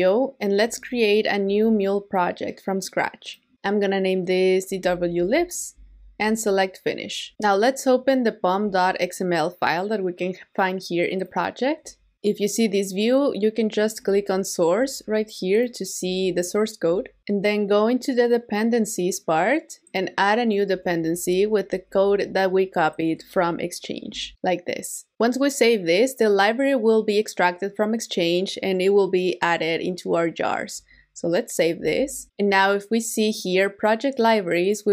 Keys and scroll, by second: 21.7 super+v, 31.8 super+s.